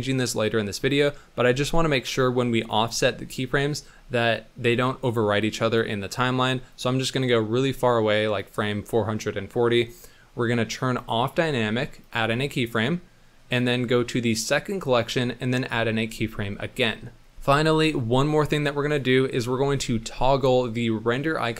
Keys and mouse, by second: 2.1 click, 5.5 drag, 6.7-8.3 drag, 11.0 click, 12.0 click, 14.4 click, 15.6 i, 17.6 click, 20.3 Left.